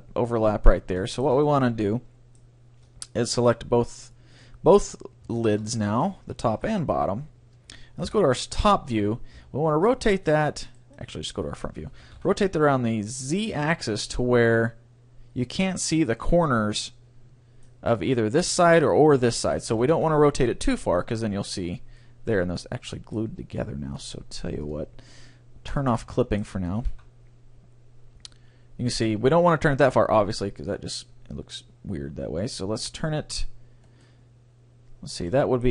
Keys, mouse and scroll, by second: 3.2-7.2 right drag, 6.6 ctrl+l, 8.0 KP_7, 9.4 r, 10.9-12.5 right drag, 11.0-12.6 middle drag, 12.0 r, 16.2-18.0 right drag, 16.8-18.4 middle drag, 19.8 r, 20.9 middle click, 22.4 middle click, 24.6-27.5 drag, 26.1-27.9 right drag, 26.7 r, 34.0-35.7 right drag, 35.3-35.7 middle drag.